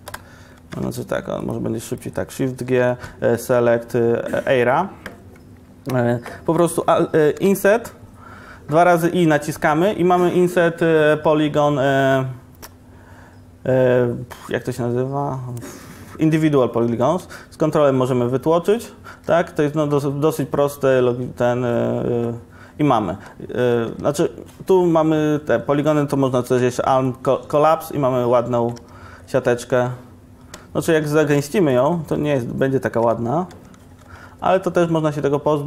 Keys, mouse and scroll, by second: 0.6 ctrl+KP_Subtract, 2.8 shift+g, 18.9 click, 19.2 Tab, 24.0 Tab, 26.6 alt+m, 28.8 Tab, 31.0 ctrl+shift+1, 32.4 ctrl+1, 33.9 ctrl+1, 34.5 Tab.